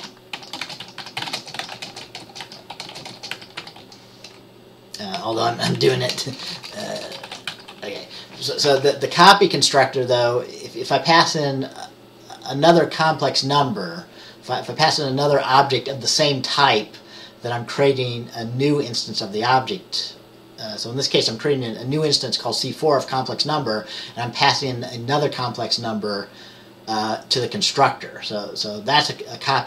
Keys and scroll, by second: 1.0-3.9 typing, 5.3 Down, 5.6 Left, 5.9 Left, 6.2-9.3 typing.